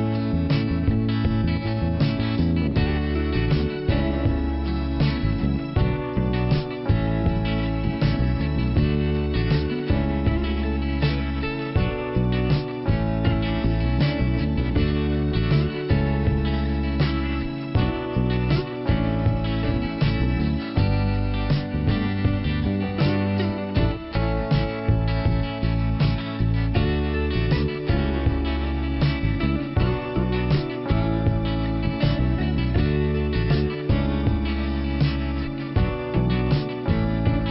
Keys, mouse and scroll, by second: 1.6 click, 3.7 click, 11.2 click, 13.1 click, 14.4 click, 14.5 click, 17.1 click, 18.1 click, 19.8 click, 21.2 scroll down 1, 29.3 scroll up 2, 30.4 click, 31.6 click, 32.2 click, 32.3 click, 35.7 click.